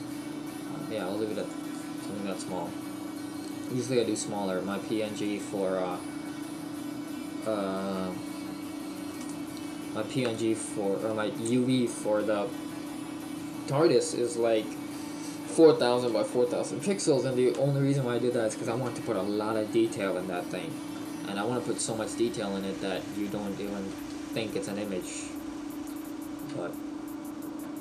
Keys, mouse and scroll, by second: 2.6 click.